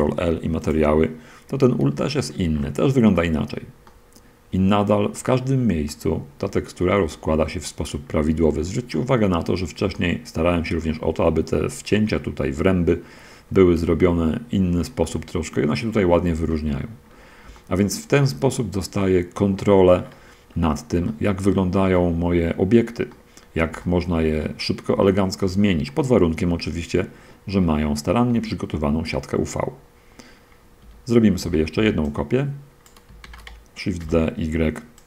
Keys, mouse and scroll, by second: 0.0 ctrl+l, 1.0 click, 1.4 scroll down 2, 2.2 shift+middle click, 2.8 shift+scroll up 1, 3.0 middle click, 4.2-7.3 middle drag, 7.5 shift+middle click, 8.2 shift+scroll up 1, 8.4 shift+middle click, 8.7 middle click, 8.9 middle click, 9.1 click, 9.4 middle click, 10.0 shift+click, 10.2 shift+click, 10.5 shift+middle click, 13.6-14.1 scroll down 1, 14.3 shift+middle click, 14.9 shift+scroll down 1, 15.0 shift+middle click, 15.1-16.1 shift+drag, 16.1 shift+middle click, 16.4 shift+click, 17.8 shift+click, 18.8 shift+middle click, 20.3-21.0 shift+scroll down 1, 21.0-22.2 shift+middle drag, 22.2 shift+click, 22.5 middle click, 22.6 click, 22.8 middle click, 23.4-24.8 middle drag, 25.0 shift+scroll down 1, 25.3 shift+middle click, 26.2 shift+click, 26.2 middle click, 26.4 click, 26.8-27.9 middle drag, 28.6 Tab, 31.1 Tab, 31.5 a, 31.9 b, 32.4-33.0 drag, 33.3 shift+d, 34.3 y.